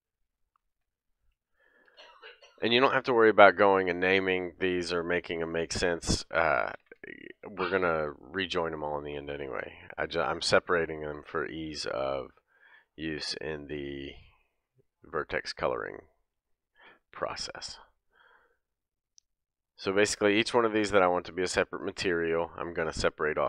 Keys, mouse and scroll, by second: 0.3 click, 0.8 l, 1.8 p, 5.0 click, 5.5 l, 6.8 p, 8.2-9.8 middle drag, 9.8 click, 9.9-18.6 middle drag, 10.1 l, 12.2 l, 13.0 scroll up 1, 17.1 p, 18.7 click, 19.1 l, 20.1 l, 20.9 l, 21.3-21.7 scroll down 1, 21.9 middle click.